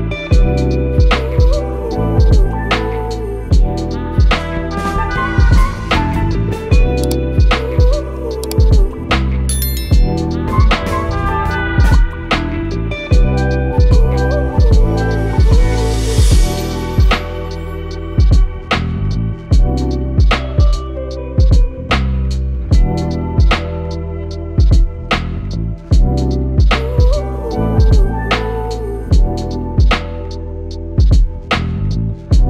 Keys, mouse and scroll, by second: 0.4 click, 2.4 v, 4.1 click, 7.4 i, 8.4 click, 9.8 v, 11.1 click, 12.3 i, 12.9 click, 14.2 v, 15.8 click, 17.4 i, 18.1-22.3 drag, 23.2 Delete, 26.5 click, 29.0-29.6 drag.